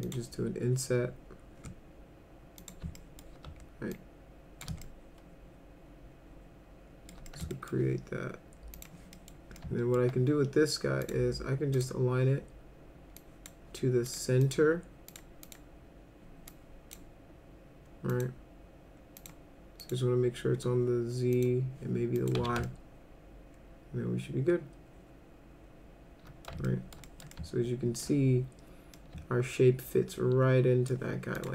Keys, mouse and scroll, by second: 0.0 click, 2.6 click, 3.0 alt+middle click, 3.9 shift+click, 4.8-7.1 alt+middle drag, 7.3 middle click, 7.5 alt+middle click, 8.7 click, 9.2 middle drag, 9.6-10.0 alt+middle drag, 11.0 click, 11.7 click, 13.2 drag, 14.1 click, 14.4 click, 15.1 click, 15.4 click, 16.5 click, 18.1 click, 19.2 click, 19.8 click, 21.4 click, 22.2 click, 22.4 z, 22.7-26.5 alt+middle drag, 26.7 alt+middle click, 27.1 middle click, 27.4 alt+middle click, 28.9-30.9 alt+middle drag, 31.4 click.